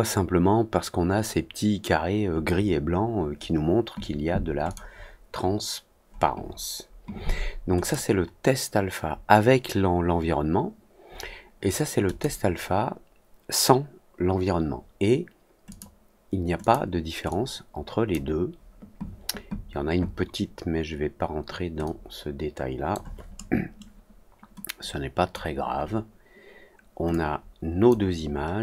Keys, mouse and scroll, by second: 4.6 click, 7.7 click, 12.0 click, 15.6 click, 16.5 click, 17.2-18.0 drag, 21.8-22.8 drag, 24.7 click, 27.0 click, 28.2-28.6 scroll down 4.